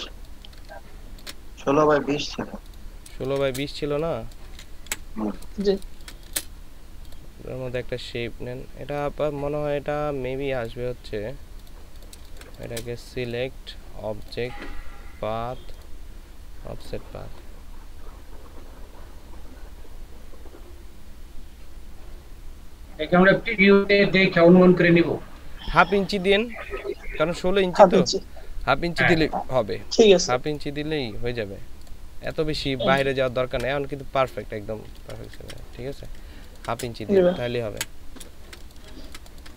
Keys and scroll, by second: 3.2 ctrl+space, 4.9 Delete, 5.5 ctrl+super+space, 12.2 ctrl+space, 33.3 ctrl+space, 34.9 ctrl+space, 36.2 ctrl+space, 37.8 Delete, 38.4 ctrl+Delete, 38.5 ctrl+space.